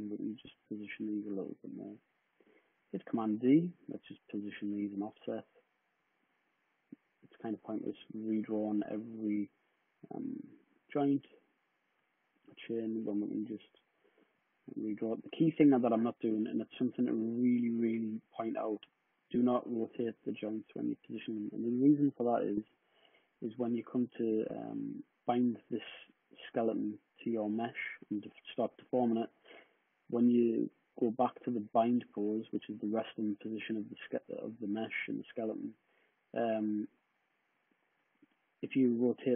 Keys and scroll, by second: 1.6 w, 2.8 super+d, 28.9 super+d.